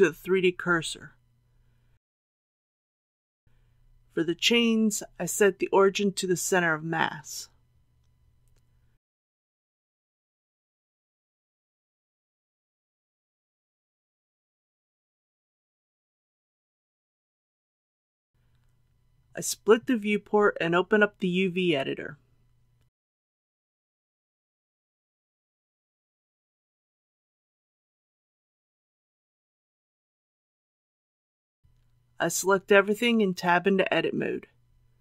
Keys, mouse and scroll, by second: 0.0 r, 1.5 click, 2.1 ctrl+z, 4.6 click, 7.1 right click, 12.5 click, 14.4 r, 15.9 click, 16.4 ctrl+z, 18.3 click, 19.1 shift+middle click, 19.1 shift+scroll down 1, 24.4-26.5 drag, 27.8 t, 28.9 click, 33.7 shift+middle click.